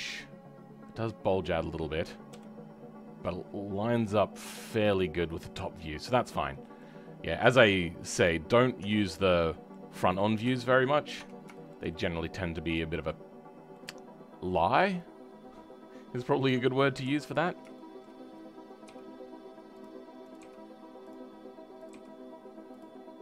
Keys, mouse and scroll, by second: 1.6-2.3 scroll down 2, 2.3 KP_7, 3.3-4.5 scroll down 2, 4.5-6.4 drag, 6.4-6.8 scroll down 2, 6.8 middle click, 7.7-8.1 scroll up 2, 8.1 middle click, 8.8 Tab, 9.0-10.1 middle drag, 10.1 scroll down 1, 10.5 right click, 10.9 scroll up 4, 11.1 Tab, 11.5-16.2 right drag, 11.5 shift+middle click, 12.7 middle click, 16.2 click, 16.9 KP_1, 17.3 scroll up 2, 17.7-18.8 shift+middle drag, 18.8 g.